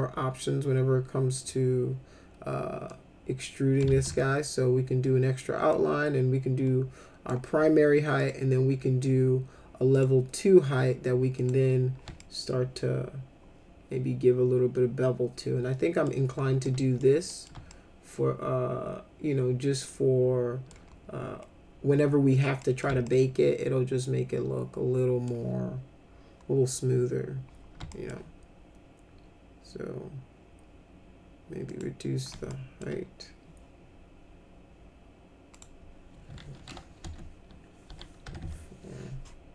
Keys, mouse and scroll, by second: 2.9 click, 3.8 ctrl+z, 5.7-7.2 drag, 8.2 click, 9.9 click, 11.3 click, 12.1-16.0 alt+middle drag, 16.6 alt+middle click, 17.3 middle click, 17.7-20.6 alt+middle drag, 22.6 middle click, 23.0-25.2 alt+middle drag, 27.9 alt+middle click, 31.7 click, 32.5 alt+middle click, 35.5 click, 37.0 BackSpace, 37.8 ., 38.2 4.